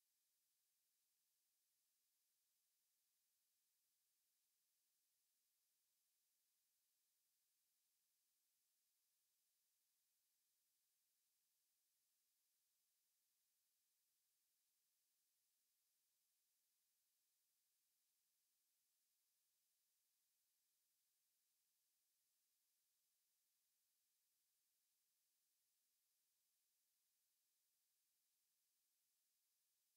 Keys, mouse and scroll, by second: 12.1 click, 16.1 x, 22.1 shift+a.